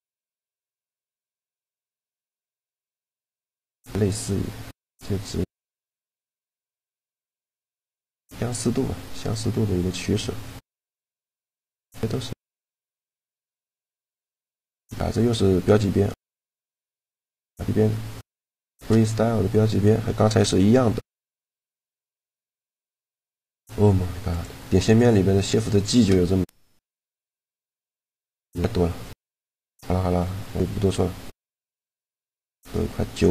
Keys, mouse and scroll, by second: 3.0 middle click, 5.1-6.7 drag, 11.3 middle click, 12.3 click, 13.1 a, 13.4 click, 13.4-15.2 right drag, 13.9 shift+g, 17.2-18.5 middle drag, 18.5 shift+g, 21.6-24.8 middle drag, 24.3-26.7 drag, 25.6 shift+g, 27.4-28.8 drag, 27.6 shift+g, 29.5 Tab, 29.9 Tab, 30.8 a.